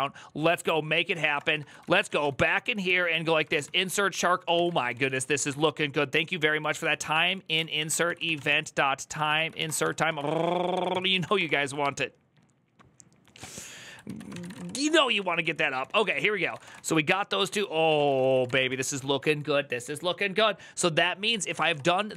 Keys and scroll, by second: 0.4 Tab, 0.7-11.5 typing, 3.3 ctrl+n, 3.4 ctrl+y, 8.9 ctrl+n, 13.8 alt+{, 14.0-17.0 typing, 17.7 ctrl+^, 18.0 Return, 18.0 ctrl+c, 18.0-19.5 typing, 21.1-22.1 typing.